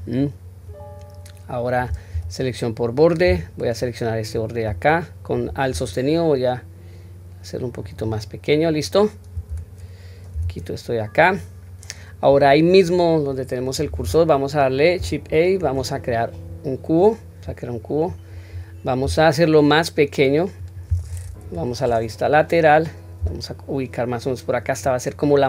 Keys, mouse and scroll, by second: 3.6 alt+click, 5.7 s, 8.4-8.7 scroll down 1, 9.5 Tab, 10.3 q, 10.8-11.3 scroll down 1, 11.3 scroll up 1, 12.5 scroll up 2, 15.3 shift+a, 18.1-19.0 scroll down 3, 19.0-20.6 scroll down 1, 19.0 s, 21.4 KP_3, 21.8 scroll up 1, 23.2 scroll up 1, 23.2 g.